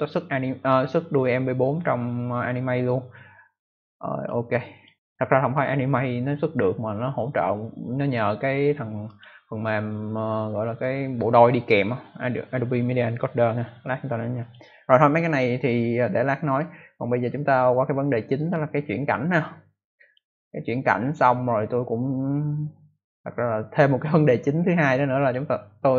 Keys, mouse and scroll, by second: 4.1 click, 4.7 click, 9.0 click, 14.3 click, 16.4 click, 18.3 click, 19.3 click, 21.0 click.